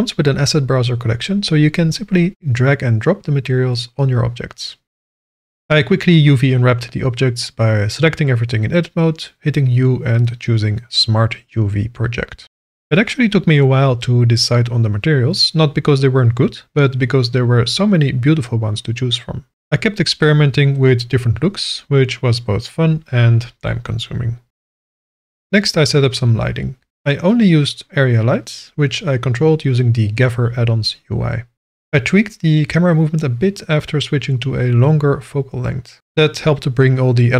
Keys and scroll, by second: 5.2 /, 8.5 Tab, 9.0 a, 14.1 Tab.